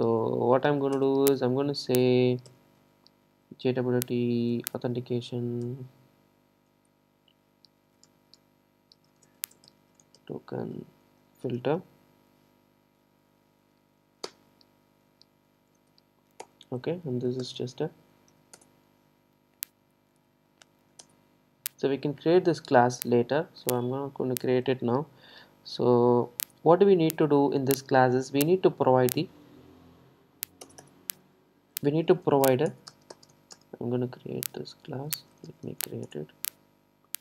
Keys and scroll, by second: 1.0 Return, 16.5 Return, 21.1 alt+Return, 29.9 super+c.